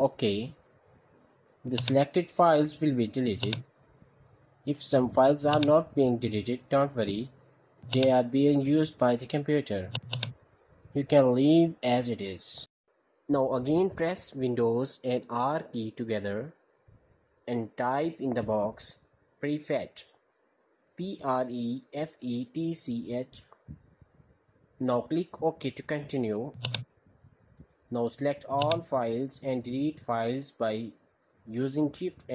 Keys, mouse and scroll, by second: 1.6-2.6 drag, 3.2-3.8 drag, 4.0 click, 5.3 click, 6.1 drag, 7.7 click, 9.7-10.9 drag, 16.7 super+r, 21.0-23.8 typing, 26.4-27.4 drag, 28.4-29.2 drag, 29.8 ctrl+a.